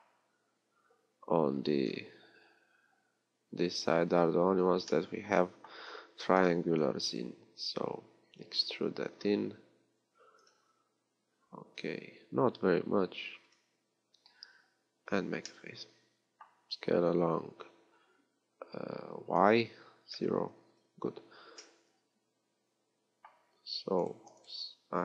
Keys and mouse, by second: 9.2 e, 15.2-17.4 middle drag, 15.2 f, 17.4 s, 21.8-25.0 middle drag.